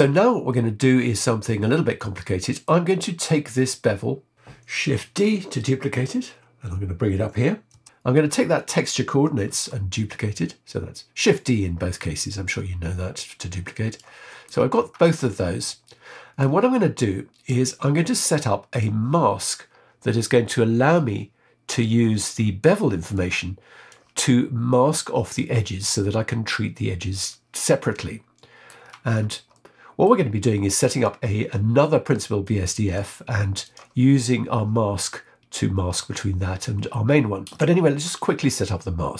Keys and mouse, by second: 0.5-2.6 middle drag, 3.4 click, 5.2 shift+d, 8.5 click, 9.4 shift+d, 12.4-13.9 drag, 14.2 middle click, 15.5 middle click, 16.9 click, 17.9 click, 22.2 click, 23.1 click, 27.9 middle click, 29.5 middle click, 30.9 click, 32.4 click, 33.6 click, 38.2-39.1 middle drag.